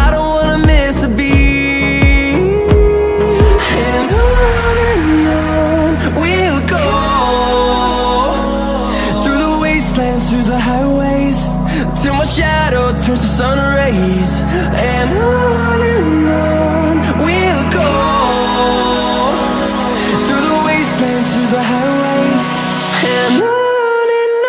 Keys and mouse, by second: 1.0 g, 2.6 s, 5.8 s, 8.1 s, 9.2 g, 11.4 s, 12.8 g, 14.2 click, 15.6 middle click, 16.0 click, 16.7 g, 20.8 click, 21.5 Tab, 22.3 click, 22.9 click, 23.5-24.4 middle drag.